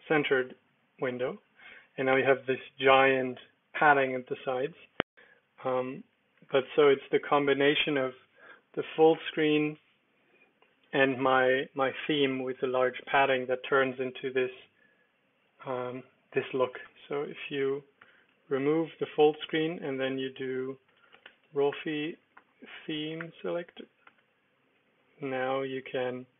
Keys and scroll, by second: 4.8 Escape, 5.1-7.2 typing, 7.4 super+d, 16.8 Escape, 18.0 typing, 18.5 super+Return, 19.6-23.6 typing, 24.0 Return, 25.3 Down, 25.7 Return.